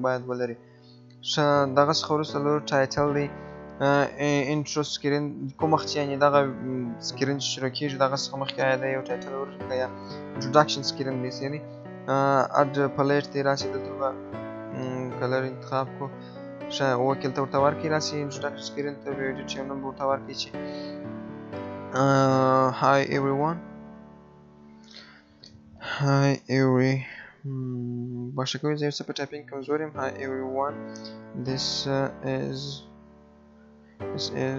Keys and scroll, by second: 26.4 BackSpace, 32.9 BackSpace.